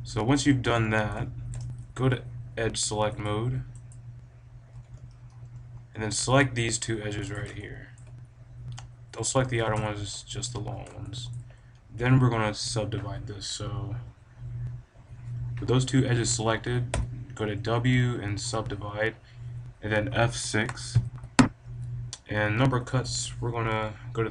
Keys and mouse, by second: 0.3 click, 0.5 a, 4.7 b, 5.3 right click, 7.3-9.2 right drag, 7.6-9.0 drag, 9.2 click, 9.8-12.9 drag, 16.9 w, 20.8 F6.